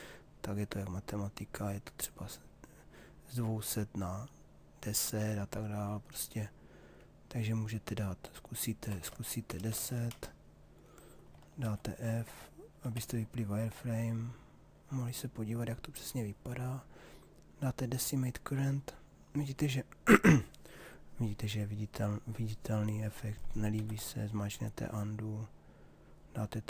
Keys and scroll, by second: 9.1 1, 9.7 0, 10.1 Return, 11.6 shift+f, 23.3 ctrl+z.